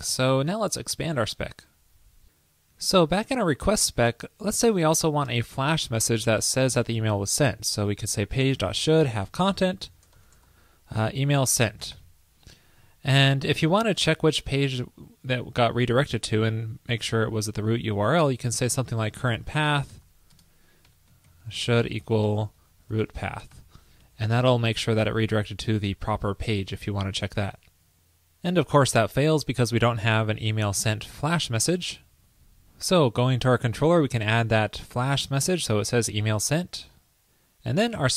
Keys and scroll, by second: 5.4 super+Return, 12.6 super+Right, 24.1 super+Right, 26.8 super+s, 34.2 super+v, 36.1 super+s.